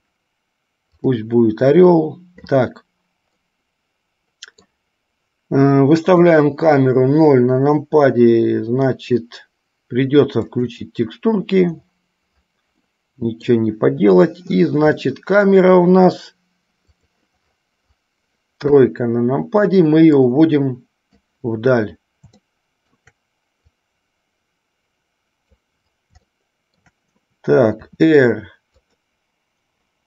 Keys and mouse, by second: 1.3 click, 3.5-4.8 middle drag, 13.2 middle click, 15.1-15.7 middle drag, 17.1 click, 19.1 KP_3, 20.5-21.5 drag, 22.6-23.1 shift+middle drag, 24.0-25.8 drag, 26.5 shift+middle click.